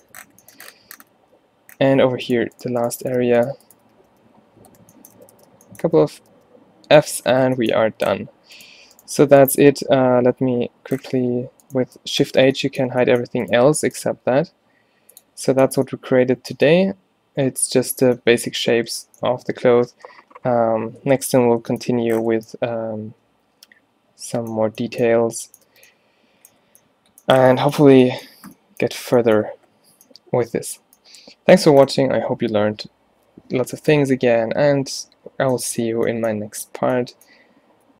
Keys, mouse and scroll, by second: 2.5 a, 3.0 shift+right click, 3.3 f, 4.1 f, 5.3 f, 6.1 f, 6.2 f, 6.4 f, 7.3 Tab, 7.8 a, 8.9 click, 11.3 g, 12.3 shift+h, 13.0 a, 14.3 t, 15.8 a, 21.4-22.5 middle drag, 25.8 Tab.